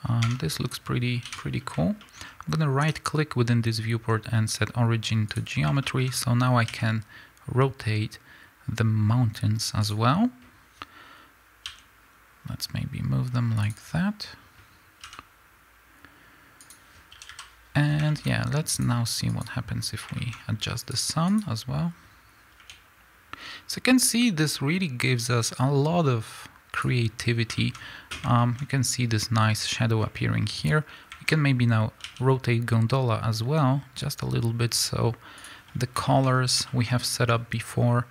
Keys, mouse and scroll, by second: 0.1 Tab, 1.2 KP_7, 1.9 middle click, 2.1-2.7 scroll down 1, 2.7-5.7 right drag, 5.7 middle click, 6.6 r, 9.8 click, 11.6 g, 13.6 click, 15.0 g, 16.6 click, 17.1 a, 17.7 scroll down 1, 18.0-18.6 middle drag, 18.2-18.6 scroll up 2, 18.6 click, 19.2 click, 20.1 middle click, 20.3-20.7 scroll up 2, 20.7 click, 21.2 click, 22.5 r, 26.7 click, 27.5-30.5 middle drag, 27.7-28.3 scroll up 2, 29.9-30.5 scroll down 2, 30.5 click, 31.9 r, 35.3 click, 36.0-38.1 middle drag, 36.1-36.6 scroll up 2.